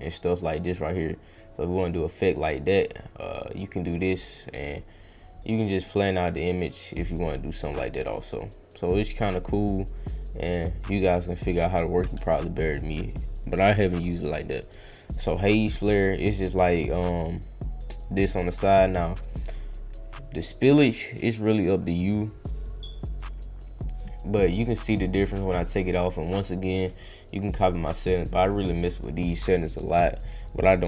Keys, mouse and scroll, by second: 5.6-12.0 drag, 14.6 click, 15.1 click, 15.6 click, 17.3-18.3 drag, 23.5 scroll down 1, 24.6 click, 24.9 click, 25.3 click, 25.6 click, 27.7-28.9 drag, 30.4 click, 30.7 click.